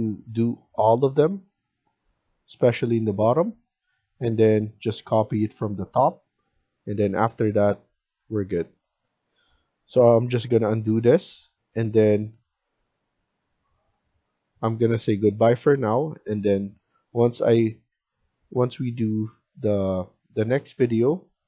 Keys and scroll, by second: 10.2 ctrl+z.